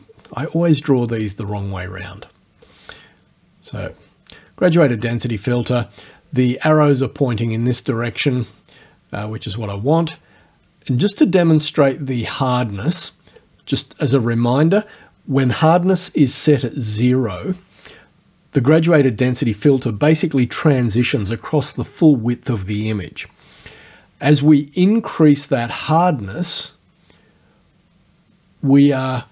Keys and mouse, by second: 3.7-6.3 drag, 10.0-13.6 drag, 26.3-29.2 drag.